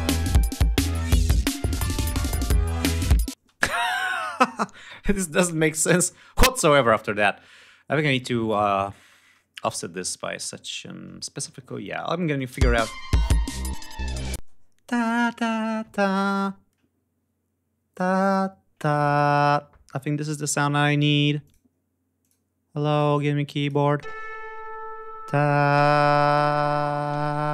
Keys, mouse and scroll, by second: 3.3 space, 5.9-6.2 scroll up 2, 6.5-6.9 scroll down 2, 8.3 scroll up 2, 9.5-9.8 scroll down 2, 10.8 scroll up 2, 11.0-11.3 scroll down 2, 11.4-12.0 scroll up 2, 12.4 click, 12.5 space, 12.7 ctrl+scroll up 2, 14.4 space, 21.4 click, 22.2 click, 22.9 click, 23.6 click.